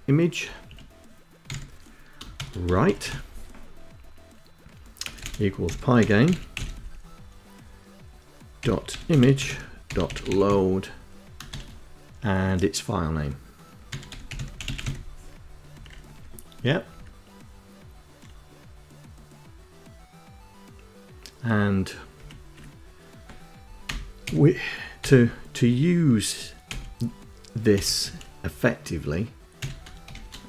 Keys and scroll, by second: 0.7 e, 1.8-2.8 typing, 4.3-6.3 typing, 7.9-10.1 typing, 12.8-14.5 typing, 14.9 Right, 16.1 Left, 21.3 Right, 21.7 Left, 23.0 ., 23.5 c, 24.2 o, 25.9-29.8 typing.